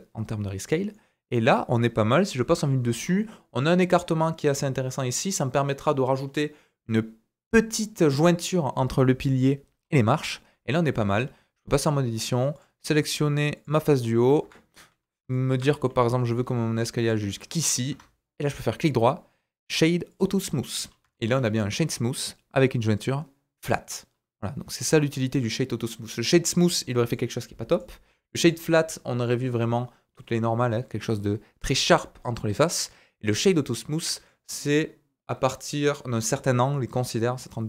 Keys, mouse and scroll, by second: 2.5 KP_7, 3.0 scroll up 2, 9.9 scroll down 2, 10.8-11.5 scroll down 2, 11.5 Tab, 12.5-13.7 drag, 13.7-19.0 middle drag, 13.8-19.0 scroll down 2, 19.0-21.0 right drag, 20.5 middle click, 20.8-23.2 scroll up 4, 21.0-21.3 shift+drag, 21.1 shift+middle click, 21.4-37.0 right drag, 23.2-24.1 scroll up 1, 24.1-24.7 scroll down 2, 26.8 middle click, 28.7-31.5 scroll up 2, 31.9 middle click, 33.9 middle click.